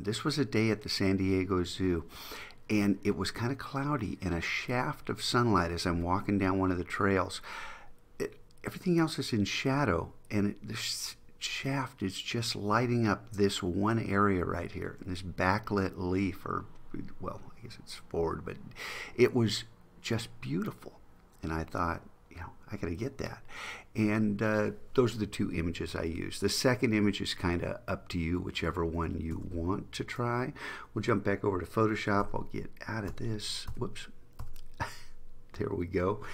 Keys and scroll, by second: 29.5 super+Tab.